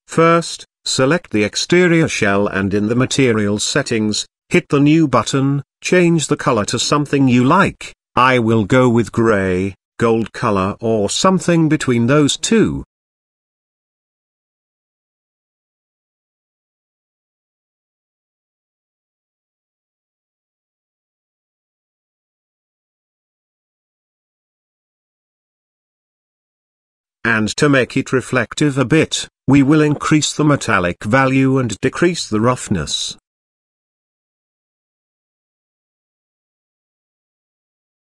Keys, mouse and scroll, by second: 0.4 click, 2.3 n, 3.3 click, 4.3 click, 6.9 drag, 8.5 click, 16.4 click, 17.7-19.0 scroll down 4, 19.0 click, 26.7-27.2 scroll down 1, 27.2-27.8 scroll down 5, 27.9-30.5 drag, 31.0-35.1 drag, 36.2 click.